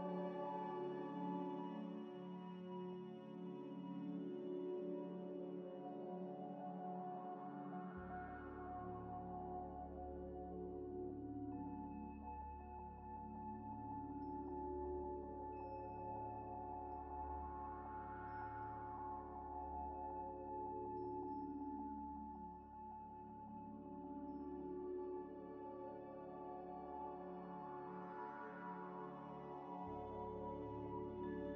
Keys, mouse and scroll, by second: 0.1 middle click, 0.4 scroll up 1, 5.2 scroll down 1, 5.5 middle click, 7.4-9.1 scroll up 1, 12.7 scroll down 1, 13.6 middle click, 14.0 ctrl+right click, 17.1 scroll up 1, 19.1 middle click, 19.1 scroll up 1, 24.3 right click.